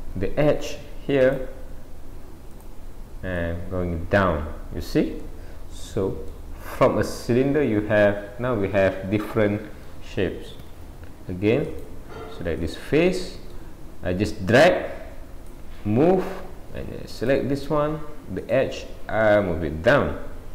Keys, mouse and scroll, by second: 0.9-1.2 scroll up 1, 1.2 click, 2.6 click, 5.3 middle click, 6.7 middle click, 11.7 click, 12.6 click, 13.1 middle click, 14.3 click, 15.8 middle click, 17.2 click, 18.4 click.